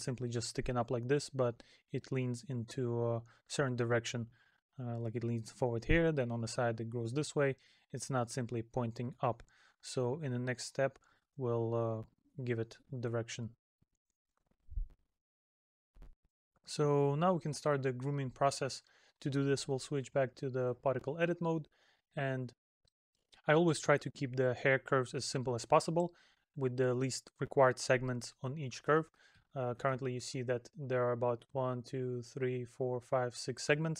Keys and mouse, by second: 22.3 middle click, 25.1 middle click, 28.4 middle click, 29.7 middle click, 33.8 middle click.